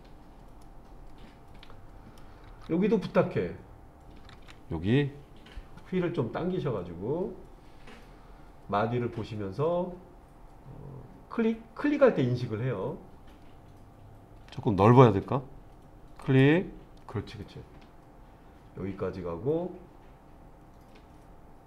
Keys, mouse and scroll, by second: 0.6-2.2 middle drag, 2.9 middle click, 6.1-9.7 scroll up 3, 16.2-21.6 drag.